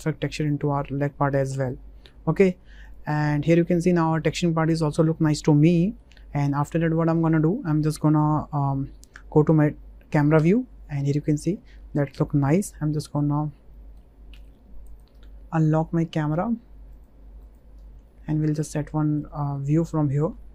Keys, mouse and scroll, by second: 0.4 click, 0.9-1.4 middle drag, 2.3 middle drag, 2.8 click, 3.3 middle drag, 3.9 shift+middle click, 4.2-6.0 middle drag, 6.5 middle click, 7.0 shift+middle click, 7.3 middle click, 10.4 KP_0, 13.7 shift+middle click, 14.3 b, 15.1 n, 16.9 click, 17.4 click, 17.7 n, 18.0-19.1 middle drag, 19.5 middle click, 20.0 shift+middle click, 20.4 ctrl+middle click.